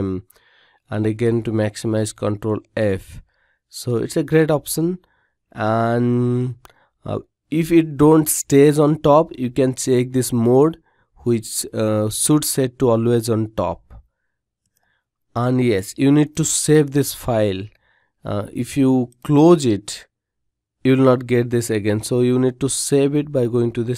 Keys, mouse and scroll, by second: 1.0 ctrl+f.